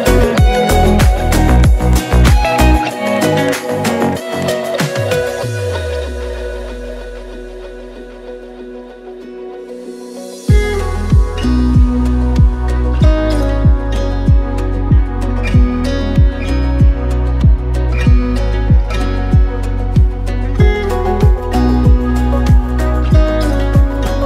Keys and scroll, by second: 3.5 ctrl+z, 5.0 ctrl+z, 5.3 ctrl+z, 5.7 ctrl+z, 6.5 ctrl+z, 7.5 ctrl+z, 7.9 Tab, 12.1 alt+q, 12.6 Tab, 12.9 Tab, 14.2 ctrl+z, 14.2 ], 14.3 ], 15.9 alt+q, 17.3 ctrl+z, 17.7 Tab, 19.8 Tab, 20.1 alt+q, 23.5 ctrl+z.